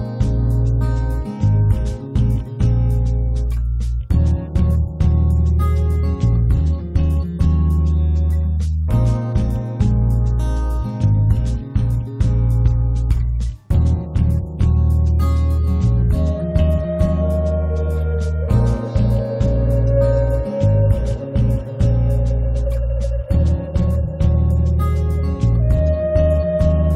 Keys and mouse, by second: 0.0 click, 0.7-1.9 drag, 0.9 middle click, 0.9 right click, 2.0-3.6 middle drag, 2.3-3.9 drag, 2.3-3.6 right drag, 3.9 right click, 4.5 middle click, 4.8 click, 4.8-6.1 right drag, 6.1 middle click, 6.4 right click, 7.2 middle click, 7.4 click, 8.7 middle click, 9.5 click, 9.9 middle click, 10.3 middle click, 10.5-12.4 drag, 12.4 middle click, 12.5-13.7 drag, 13.7 shift+f, 14.3 click, 14.9 middle click, 15.3-16.3 drag, 17.6 click, 18.3 click, 19.5 click, 19.7-21.5 middle drag, 21.5-22.9 drag, 23.1 click, 23.7-24.9 drag, 25.1 click, 26.2-26.9 drag.